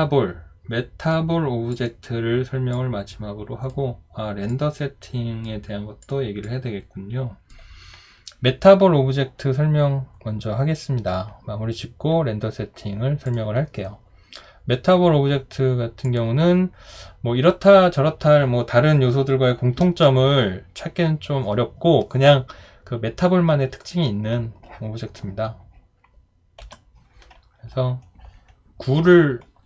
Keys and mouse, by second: 26.6 Delete.